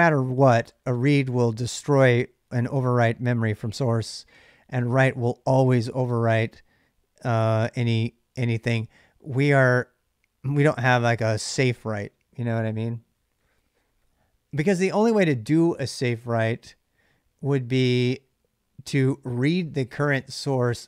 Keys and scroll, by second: 4.0 j.